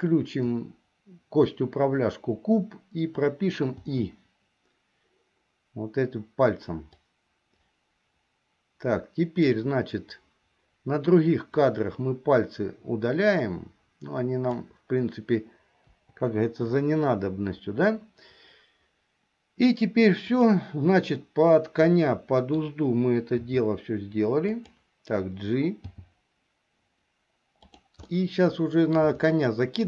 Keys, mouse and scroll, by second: 7.1-9.7 drag, 11.6-14.6 drag, 16.1 Delete, 21.4-22.8 middle drag, 23.6 r, 25.9 g, 28.2-29.2 middle drag, 29.6 shift+middle click.